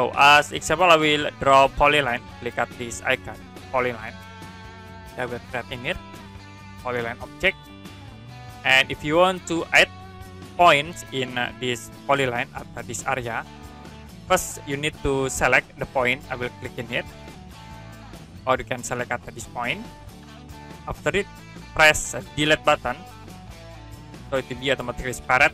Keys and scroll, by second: 8.6 Escape, 14.4 Escape, 23.9 Delete.